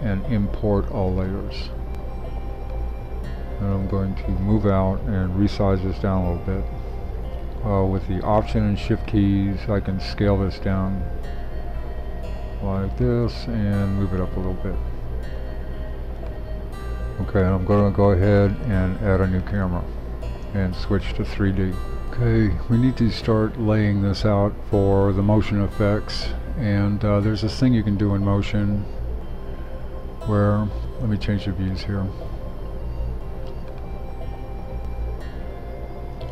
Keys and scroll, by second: 16.7 shift+super+3, 22.0 shift+super+3.